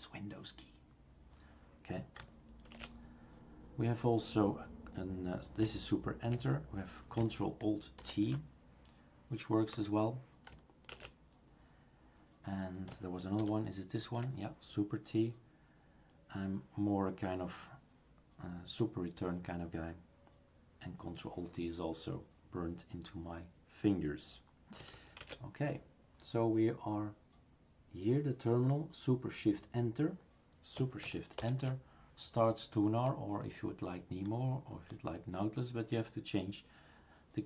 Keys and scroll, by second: 2.7 shift+super+q, 8.0 ctrl+alt+t, 9.7 Escape, 13.4 super+t, 25.2 shift+super+q, 31.4 shift+super+Return.